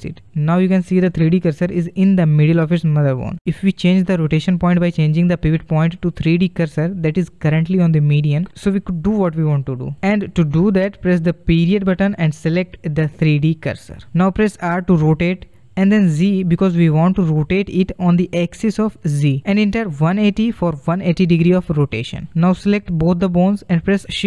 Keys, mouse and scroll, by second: 4.9-5.9 middle drag, 5.9 scroll down 1, 6.1-7.5 middle drag, 7.5 z, 11.2 ., 14.6 r, 23.2 shift+click, 24.0 shift+d.